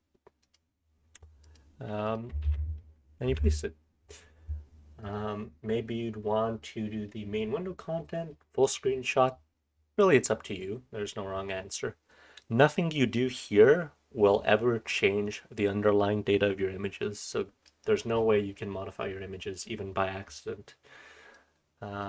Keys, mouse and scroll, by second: 5.0 click, 12.4-17.6 drag, 19.2-20.5 scroll down 2, 20.5-21.3 scroll down 1, 21.3-22.0 scroll down 1, 21.3-22.0 drag.